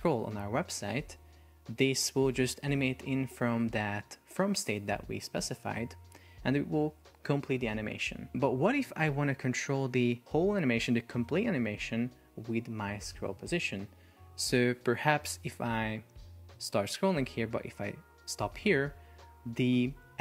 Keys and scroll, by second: 15.8 scroll.